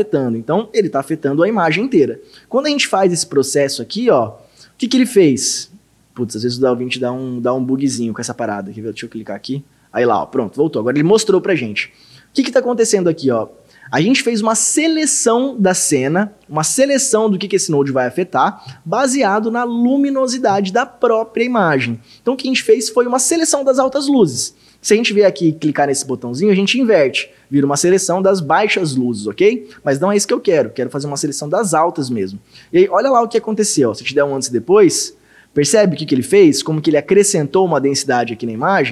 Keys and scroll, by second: 33.3 ctrl+d, 34.2 ctrl+d, 35.7 ctrl+d.